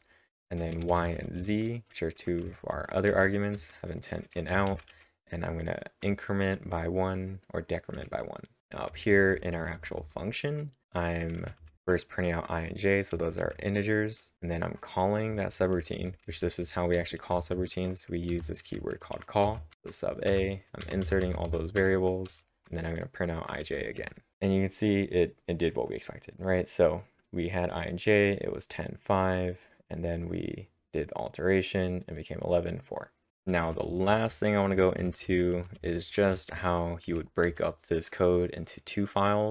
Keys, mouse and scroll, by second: 0.9-1.7 typing, 4.2-5.0 typing, 7.9-13.1 typing, 14.3-20.3 typing, 21.5-22.3 typing, 23.6-24.5 typing, 33.6-38.2 typing.